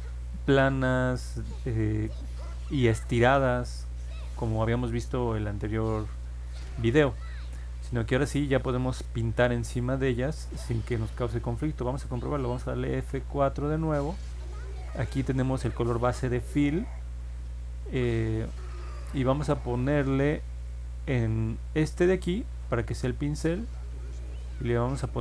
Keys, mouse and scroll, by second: 13.0 F4, 13.9 middle click, 14.1 middle click, 15.4 click, 21.2 click, 23.2 click.